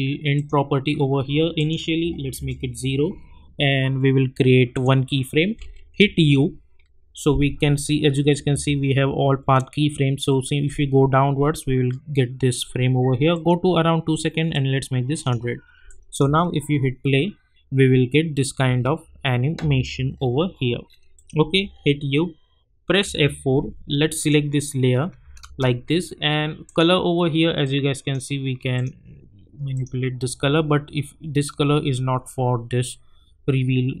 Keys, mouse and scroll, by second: 0.3 click, 2.3 Return, 4.7 click, 6.0 u, 8.2-9.0 typing, 9.5-10.2 scroll down 1, 13.3-16.2 drag, 16.2 space, 18.6 space, 20.1 scroll up 1, 21.1 click, 21.6 u, 23.0 F4, 24.2 click, 25.2 space, 26.7 click.